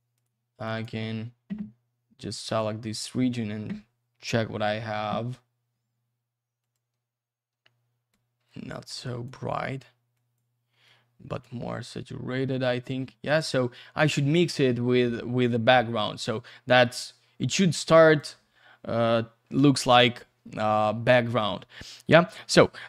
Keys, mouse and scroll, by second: 0.2 click, 1.8-2.3 scroll up 1, 2.3 middle click, 2.9-4.1 scroll down 1, 6.6 click, 10.1 click, 10.9 click, 14.7-15.5 scroll up 1, 15.5-17.1 scroll down 1, 18.1 click, 20.7-21.2 scroll up 1, 21.2-22.4 scroll down 1.